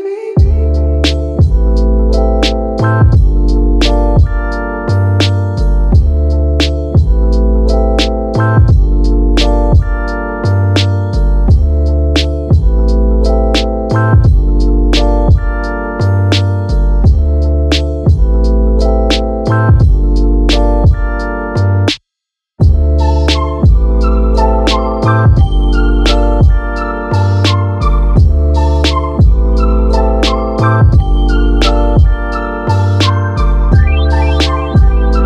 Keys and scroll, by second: 2.7 super+z.